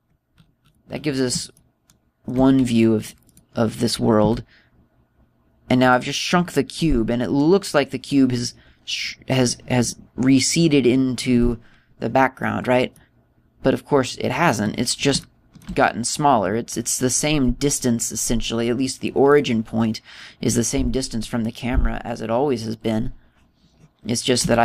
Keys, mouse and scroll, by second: 0.9 scroll down 3, 1.3-2.4 scroll up 10, 2.4 shift+middle click, 2.4 scroll up 1, 4.2 right click, 5.1 s, 6.8 click, 13.9 middle click, 16.1 shift+middle click, 16.8 middle click, 20.2 click, 22.0 click, 23.5 click.